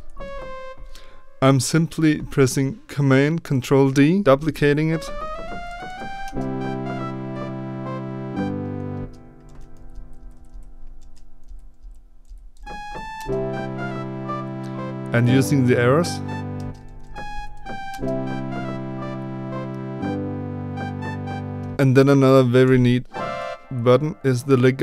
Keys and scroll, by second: 0.0 Down, 0.0 ctrl+d, 0.0 Left, 4.2 ctrl+Right, 4.8 Up, 4.9 Up, 5.0 Up, 5.5 Left, 5.6 Up, 9.4 ctrl+d, 9.7 Right, 10.4 Right, 11.0 ctrl+d, 11.4 Right, 11.7 Left, 12.2 Right, 12.5 Up, 16.8 ctrl+d, 17.0 Down, 17.2 Right, 17.5 Down, 22.6 b.